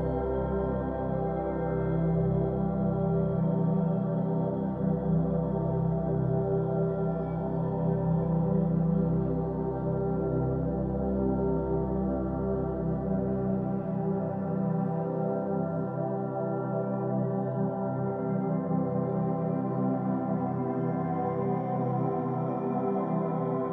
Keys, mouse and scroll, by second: 0.6-1.8 scroll up 10, 1.8 g, 2.4 Tab, 2.6-3.2 scroll down 6, 3.2 middle click, 3.4-3.8 scroll down 1, 3.8 middle click, 4.6-5.7 scroll up 13, 4.9 Tab, 5.3 middle click, 5.7 2, 5.9 click, 6.5 shift+click, 6.7 shift+click, 7.0 middle click, 7.8 shift+click, 8.1 shift+click, 8.5 g, 9.5 Tab, 9.7 middle drag, 10.0-10.3 scroll down 6, 10.3-11.6 middle drag, 11.6 Tab, 11.9 shift+middle click, 12.0 scroll up 3, 12.3 1, 12.5 click, 12.7 g, 13.9 Tab, 14.0-14.4 scroll down 8, 14.4-15.5 middle drag, 15.5 scroll up 3, 15.7 Tab, 16.2 click, 16.5 l, 16.9 middle click, 17.2 s, 19.1 middle click, 19.3-19.7 scroll up 4, 19.8 click, 19.9 g, 22.2 2, 22.3 click, 23.0 middle click.